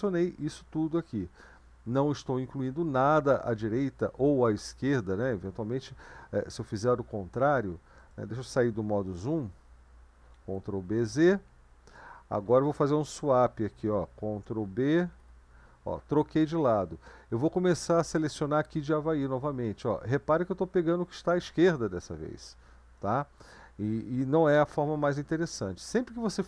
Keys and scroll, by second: 10.3 ctrl+b, 11.2 z, 14.6 ctrl+b, 15.2 shift+[.